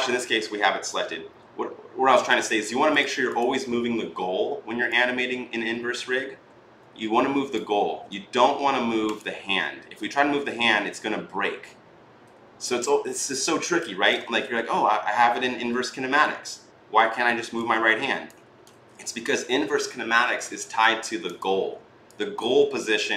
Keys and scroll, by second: 7.7 ctrl+z, 14.2 ctrl+z, 18.5 ctrl+z.